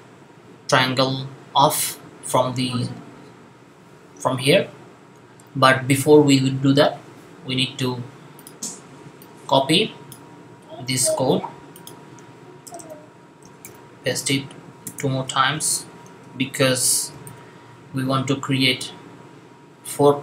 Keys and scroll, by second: 10.9 super+c, 13.5 v, 15.4 v, 17.0 v.